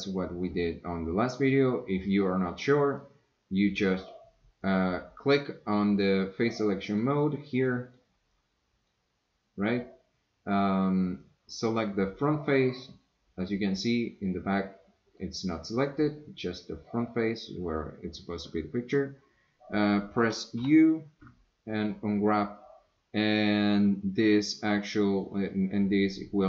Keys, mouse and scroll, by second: 3.2-4.9 right drag, 6.9 click, 7.7 click, 8.3 click, 11.1 click, 12.8-15.2 middle drag, 20.6 u.